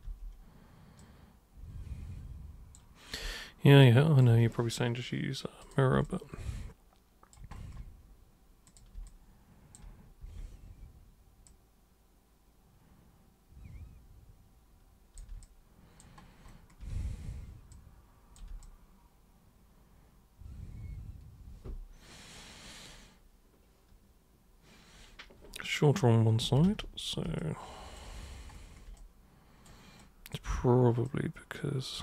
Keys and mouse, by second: 0.0 super+w, 1.0-2.7 super+drag, 3.3 alt+super+click, 4.2-5.6 alt+super+right drag, 5.6 super+click, 6.0-7.3 alt+super+drag, 8.7 super+click, 9.0-9.8 alt+super+drag, 10.2 super+e, 11.5 super+click, 15.4-16.0 alt+super+drag, 16.9 super+w, 17.7-18.3 super+drag, 18.3 alt+super+right click, 18.6-26.4 alt+super+drag, 26.6 ctrl+super+z, 27.4 alt+super+click, 29.0 super+right click, 30.0-30.3 super+drag, 31.1-32.0 super+drag.